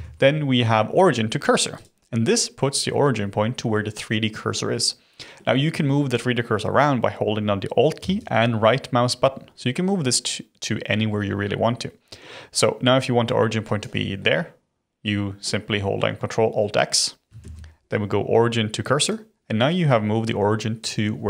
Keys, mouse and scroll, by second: 0.0 ctrl+alt+x, 2.0-7.5 middle drag, 8.2 shift+right click, 14.1-17.2 middle drag, 17.4 ctrl+alt+x.